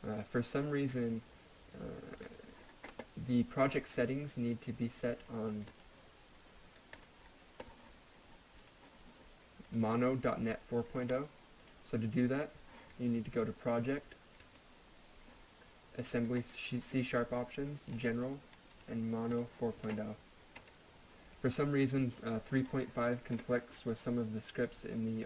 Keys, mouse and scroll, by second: 2.2 click, 5.7 click.